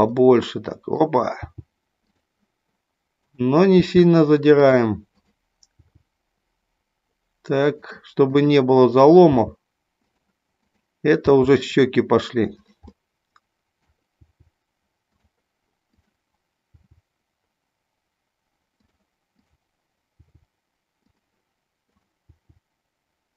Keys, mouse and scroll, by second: 0.2 middle click, 1.4 g, 3.2 click, 3.8 g, 4.6 click, 5.2 click, 8.3 click, 9.3 g, 10.5 click, 11.3 g, 12.5 click, 13.0 middle click, 14.3 g, 15.0 click, 15.9 click, 16.7 g, 19.4 click, 20.2 g, 21.8 click, 22.4 g.